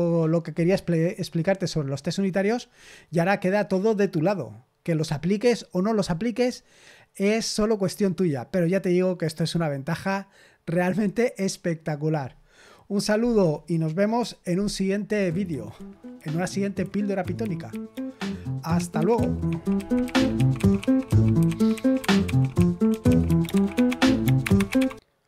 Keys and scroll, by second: 15.0 super+x.